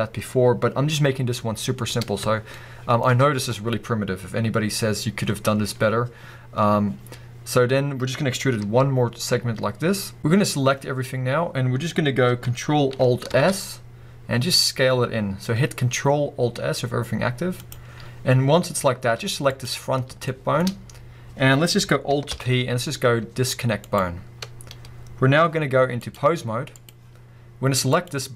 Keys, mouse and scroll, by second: 1.3-2.5 scroll up 1, 2.5-10.2 shift+middle drag, 3.1-4.9 scroll up 2, 4.9-5.7 scroll down 2, 5.7-6.7 scroll down 1, 6.7-8.2 scroll down 1, 8.2-8.6 scroll up 2, 8.6 e, 10.2 scroll up 2, 10.3-11.2 scroll down 2, 11.2-12.0 scroll up 2, 12.0-13.3 scroll up 1, 13.3 ctrl+alt+s, 17.7 click, 19.5 click, 20.3-26.0 shift+middle drag, 20.7-22.3 scroll up 2, 22.3 alt+p, 24.6-26.0 scroll down 2, 26.0-28.1 drag.